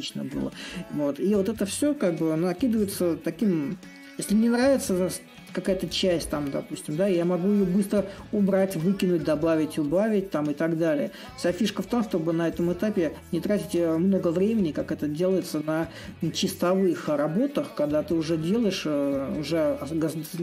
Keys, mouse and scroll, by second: 0.0-2.3 right drag, 2.3 s, 4.0-9.0 right drag, 9.6-13.7 right drag, 14.0 click, 15.4-20.4 drag.